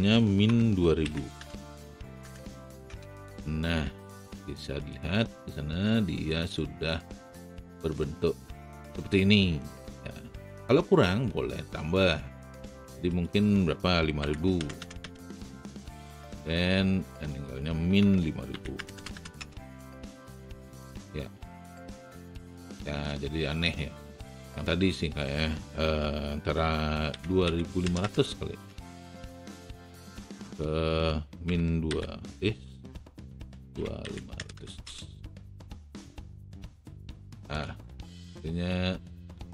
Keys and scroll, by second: 0.7 KP_Subtract, 1.0 KP_2, 1.5 n, 2.8 KP_0, 14.5 KP_0, 14.9 n, 18.1 KP_Subtract, 18.4 KP_5, 18.9 n, 19.3 n, 27.1 KP_2, 27.4 KP_5, 27.9 n, 31.5 KP_Subtract, 31.8 KP_5, 32.9 BackSpace, 33.6 KP_2, 34.3 KP_5.